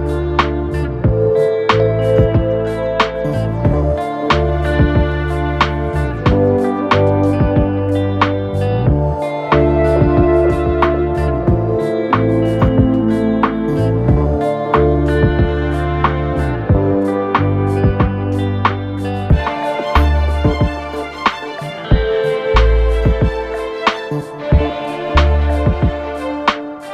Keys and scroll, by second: 2.8-3.5 typing, 8.5 Return, 14.9 alt+shift+t, 17.2 ctrl+a, 18.0 ctrl+shift+b, 18.5 ctrl+shift+i, 18.8 ctrl+shift+r, 19.0 t, 19.3 h, 20.5 d, 20.7 a, 21.0 y, 21.6 Return, 22.7 v.